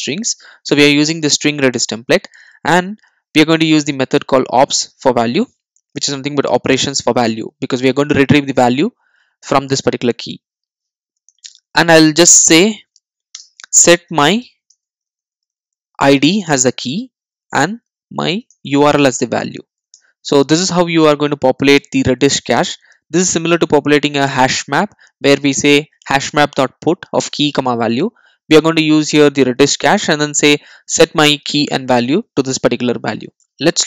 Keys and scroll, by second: 19.0 Return.